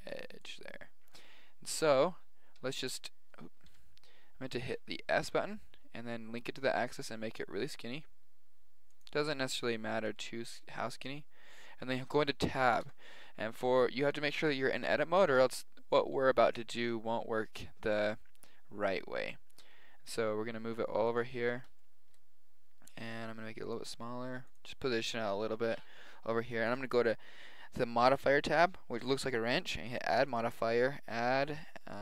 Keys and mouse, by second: 2.7-4.7 middle drag, 3.6 KP_7, 4.9 s, 10.0 s, 12.8 Tab, 19.6 g, 21.5-23.7 middle drag, 23.1 s, 23.9 g, 26.7-28.5 drag, 29.9-32.0 drag.